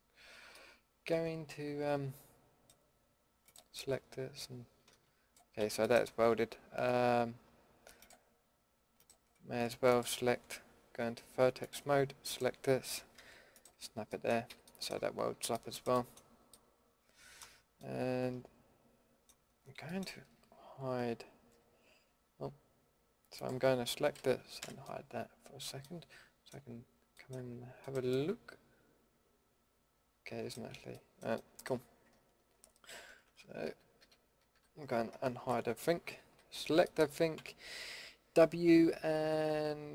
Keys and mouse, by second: 5.6 ctrl+z, 9.1-14.1 drag, 13.1 g, 14.5 a, 15.3 Tab, 16.1 Tab, 21.5 l, 23.7 l, 24.6 h, 28.3 middle drag, 28.5 middle click, 29.0-30.0 middle drag, 31.1 middle click, 32.9 ctrl+z, 33.6 a, 34.0 a, 34.5 a, 35.2 alt+h, 35.9 a, 36.3 a, 36.5 a, 37.3 w.